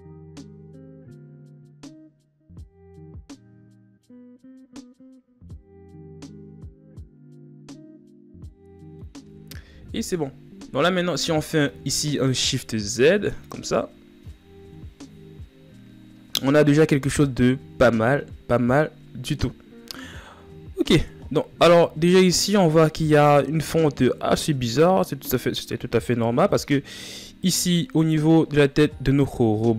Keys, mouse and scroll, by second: 0.0-0.4 drag, 0.4-0.7 scroll up 5, 0.7 scroll down 5, 0.9 scroll up 1, 1.1 right click, 1.8 click, 2.6 scroll down 1, 2.7 scroll up 2, 2.8 right click, 3.2 click, 3.3-4.0 scroll down 1, 4.0-4.4 scroll down 7, 4.4-5.0 ctrl+scroll up 7, 5.0 right click, 5.6 click, 5.7 right click, 6.1 click, 6.1 scroll down 2, 6.3 shift+scroll up 1, 7.0 click, 7.0 scroll down 1, 7.3-9.6 middle drag, 9.6 KP_1, 10.5-10.9 scroll down 6, 10.9-11.5 shift+scroll up 5, 11.9 shift+z, 12.8 shift+z, 16.9 shift+scroll up 3, 17.8 scroll up 1, 20.9 ctrl+scroll down 1, 21.6-22.5 shift+scroll up 4, 27.5 right click.